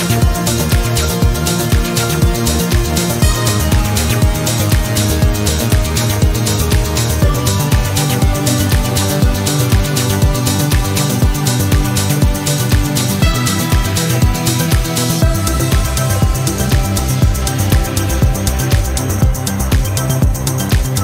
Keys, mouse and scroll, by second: 0.5-2.5 drag, 4.4 ctrl+click, 5.1 ctrl+click, 7.2 click, 8.0 click, 9.4 click, 11.6 click, 13.1 click, 14.0-14.3 scroll down 2, 14.6 click, 15.5 click, 16.9 click, 17.9 1, 18.5 click, 19.9 4.